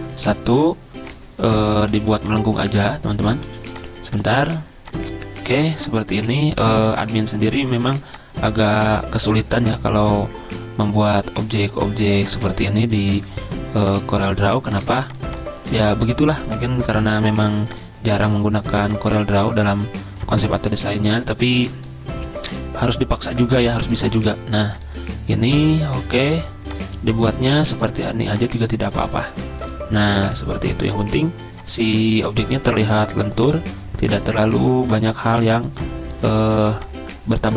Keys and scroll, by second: 2.0 ctrl+z, 3.2 ctrl+z, 3.4 ctrl+z, 13.3 ctrl+z.